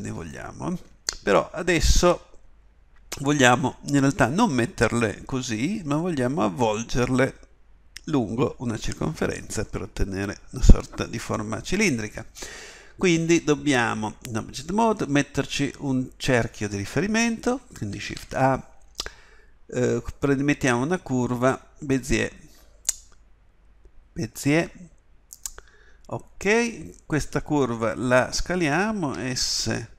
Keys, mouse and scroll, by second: 4.1-13.9 middle drag, 17.9 shift+a, 29.1 d.